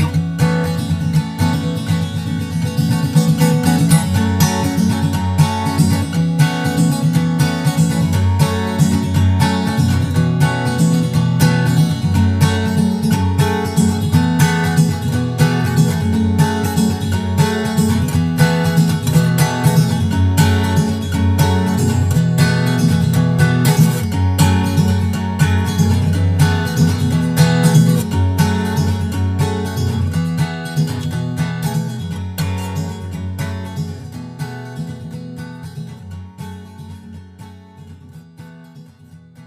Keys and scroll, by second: 5.6 super+s, 5.8 super+Tab, 6.8 super+Tab, 8.2 super+Tab, 8.7 super+Tab.